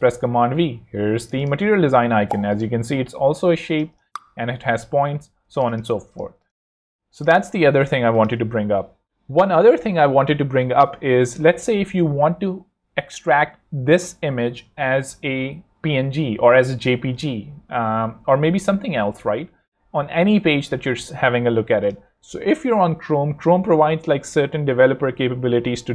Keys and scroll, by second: 0.0 shift+super+v, 1.1 z, 1.8 super+z, 3.8 super+Return, 4.5 Escape, 5.4 alt+z, 8.5 shift+super+x, 9.3 super+Tab, 16.4 shift+super+c.